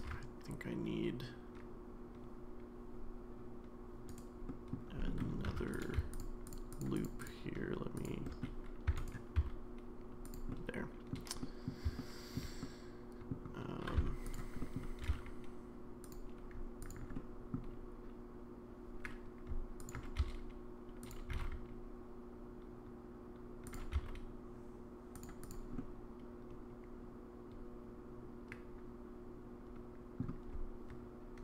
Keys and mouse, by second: 0.0 ctrl+r, 4.5 middle click, 5.1 middle click, 5.5 3, 5.7 click, 6.4 click, 6.7 click, 6.9 click, 8.0 shift+click, 8.2 middle click, 8.9 e, 10.5 middle click, 10.5 s, 11.4 middle click, 12.0 shift+middle click, 12.6 middle click, 14.3 click, 14.3 1, 14.6 middle click, 15.0 g, 17.1 middle click, 20.2 s, 21.3 g, 23.9 s, 25.8-30.2 middle drag.